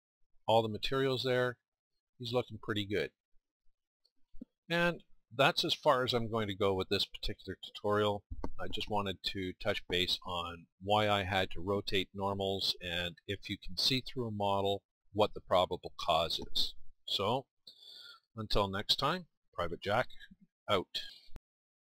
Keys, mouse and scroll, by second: 12.6 middle click, 21.1 middle click.